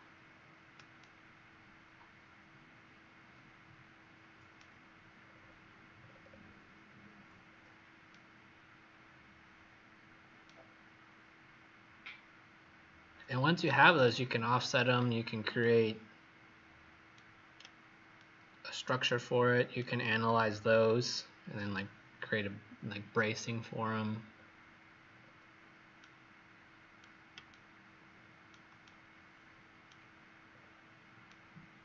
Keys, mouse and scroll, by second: 0.9 right click, 5.2 scroll down 3, 5.9 scroll down 1, 7.5 scroll down 1, 8.0 right click, 11.1 scroll down 1, 12.0-13.3 scroll up 1, 13.3-14.1 scroll down 1, 14.1-15.5 scroll up 1, 15.5 right click, 19.1 right click, 24.3-25.0 scroll down 3, 25.0 scroll up 1, 27.4 shift+right click, 28.7 right click, 30.4-31.2 scroll down 2, 31.2 right click.